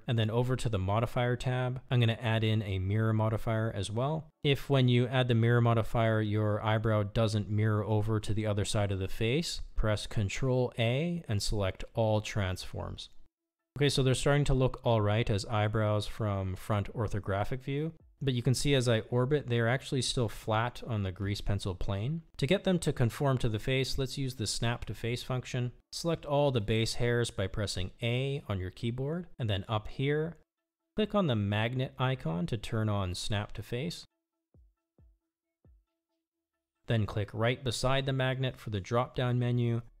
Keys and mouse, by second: 1.6 click, 3.0 click, 6.9 click, 10.1-12.4 drag, 13.5 click, 18.1-22.9 middle drag, 25.1 KP_1, 29.2 Tab, 31.5 a, 36.4 click, 39.0-40.0 drag.